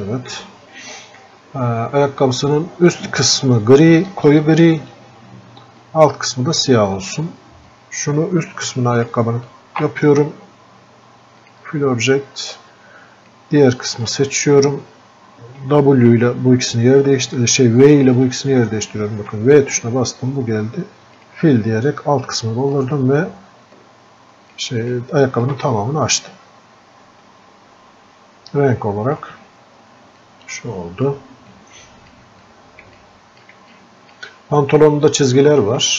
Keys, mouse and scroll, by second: 4.7-16.7 drag, 20.0 v, 23.2-26.0 ctrl+shift+drag, 26.0-35.9 drag.